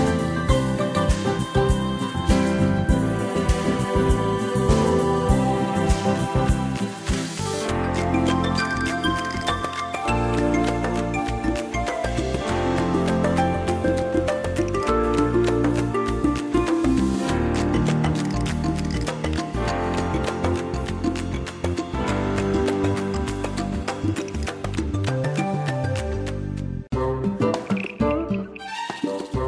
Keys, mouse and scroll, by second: 6.1 click, 28.4 click.